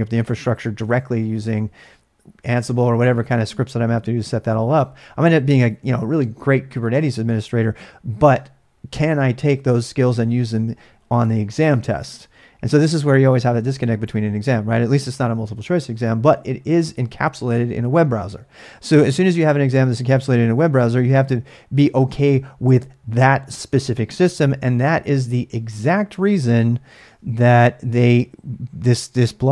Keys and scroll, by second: 24.3 ctrl+a, 24.4 ctrl+a, 25.9-27.4 typing, 27.5 ctrl+a, 27.6 ctrl+a.